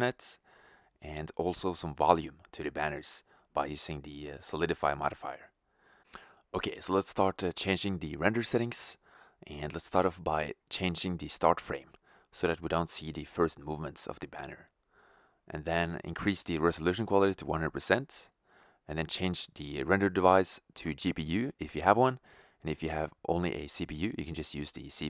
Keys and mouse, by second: 0.5 shift+z, 0.8 click, 1.2 shift+f, 2.5 r, 3.2 shift+f, 4.4 shift+z, 5.6 shift+z, 7.7 click, 14.1-16.4 middle drag, 20.1 shift+z, 22.5 shift+z, 25.0 click.